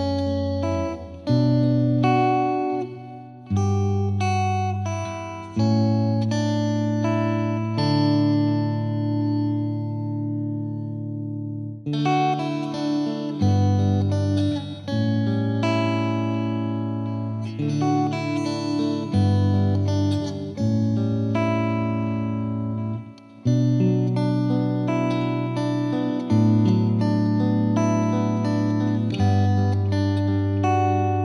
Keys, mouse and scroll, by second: 0.3 space, 1.8 space, 7.0-7.7 middle drag, 7.7 drag, 7.9-8.4 middle drag, 8.4-9.9 drag, 10.3 scroll up 2, 10.5-11.1 middle drag, 11.1-12.4 drag, 12.4-12.8 scroll down 1, 13.4-14.5 drag, 14.5 space, 15.2-16.2 middle drag, 16.2-16.8 scroll down 2, 17.3-18.1 middle drag, 17.3 scroll down 1, 18.1 click, 18.3 middle drag, 18.5 scroll down 1, 18.7 shift+middle click, 19.4 click, 19.6-20.2 middle drag, 20.2 scroll up 1, 20.3-21.3 scroll down 3, 20.7 middle drag, 21.3-22.2 shift+middle drag, 22.2-24.2 drag, 24.5-25.6 drag, 25.6-26.3 scroll down 10, 26.3-26.7 scroll up 2, 26.7-28.3 drag, 31.1-31.2 drag.